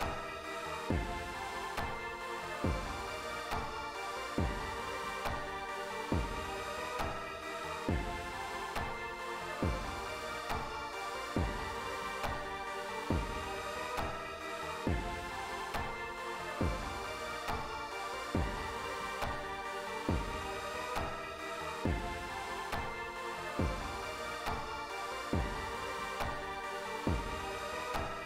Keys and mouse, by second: 9.8 click, 11.8 click, 12.5 click, 13.5 click, 14.2 click, 14.9 click, 15.6 click, 16.4 click, 18.7 click, 19.5 click, 22.4 click, 23.7 click, 24.6 click, 25.3 click, 26.0 click.